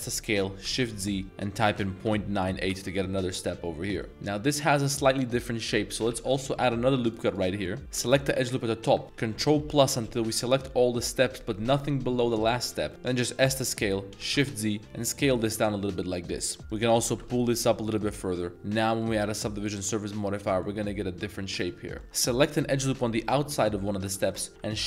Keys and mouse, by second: 0.0-2.2 typing, 2.6 Return, 4.0 middle click, 5.6 middle click, 6.3 ctrl+r, 7.2 click, 7.6 middle click, 9.0 ctrl+KP_Add, 9.3 ctrl+KP_Add, 9.6 ctrl+KP_Add, 10.1 ctrl+KP_Add, 12.4 middle click, 12.9 middle click, 12.9 d, 13.4 s, 14.2 shift+z, 16.6 alt+1, 16.7 alt+click, 17.1 g, 17.3 z, 17.9 click, 18.2 Tab, 19.0 click, 20.4 middle drag, 21.5 middle drag, 22.0 z, 22.6 alt+click, 23.5 middle click.